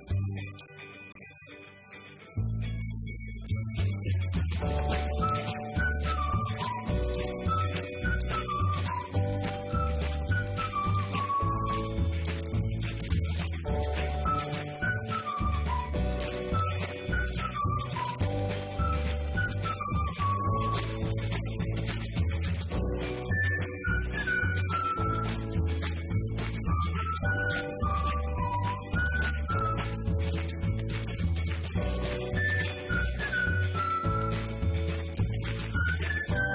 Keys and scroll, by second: 0.0-1.1 typing, 5.5 Left, 7.0-8.9 typing, 9.6 Right, 10.1 Left, 10.3 shift+Right, 11.3-14.9 typing, 16.0-19.5 typing.